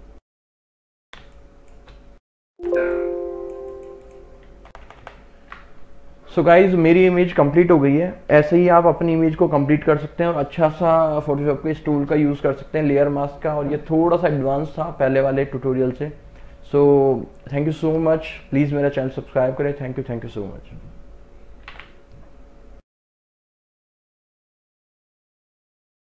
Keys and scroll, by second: 1.3 space, 2.6 x, 4.8 ctrl+KP_Subtract.